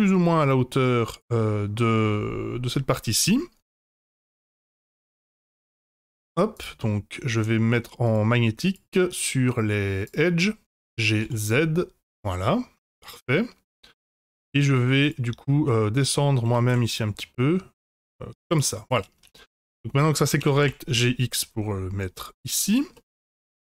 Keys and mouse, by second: 5.4 s, 8.0 click, 8.7-10.2 drag, 10.7 g, 13.1-14.1 middle drag, 14.3 Tab, 14.8 3, 15.6 middle click, 16.4 g, 18.8 click, 19.2 Tab, 20.4 g, 22.9-23.5 middle drag.